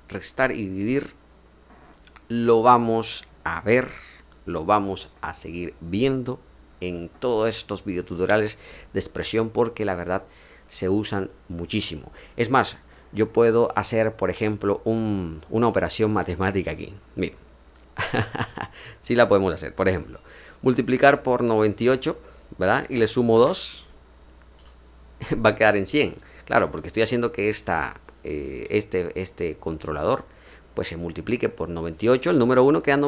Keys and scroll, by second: 22.6-23.8 typing.